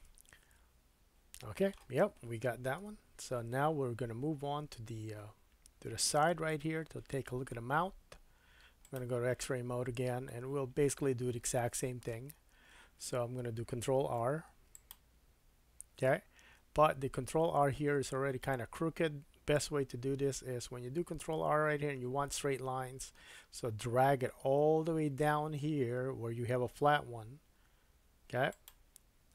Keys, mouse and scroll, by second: 2.8 KP_1, 6.1 KP_3, 8.8-28.6 drag, 9.6-10.1 scroll up 3, 10.3 shift+middle click, 14.2 ctrl+r, 28.6-29.3 middle drag.